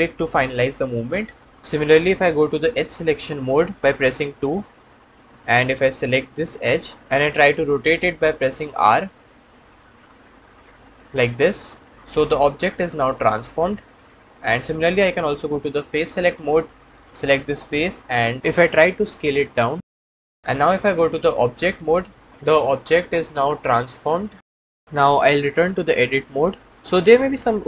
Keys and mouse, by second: 0.8 click, 4.1 2, 8.0 r, 11.7 middle click, 12.0-14.4 middle drag, 15.7 3, 16.8 middle click, 18.9 s, 21.3 Tab, 21.7-23.2 middle drag, 24.1-24.8 middle drag, 26.5 Tab.